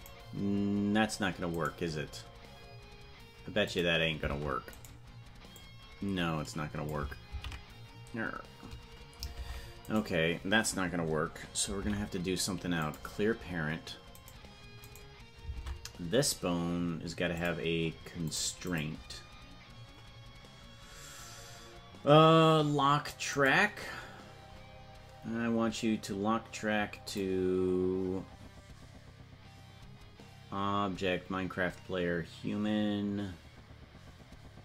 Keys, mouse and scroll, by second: 3.6 click, 4.3 ctrl+Tab, 4.8 right click, 5.5-6.9 drag, 8.2 ctrl+z, 9.5 ctrl+Tab, 11.7 alt+p, 14.3 right click, 15.6 ctrl+Tab, 17.3 click, 18.2 click, 18.6-24.0 drag, 27.0 click.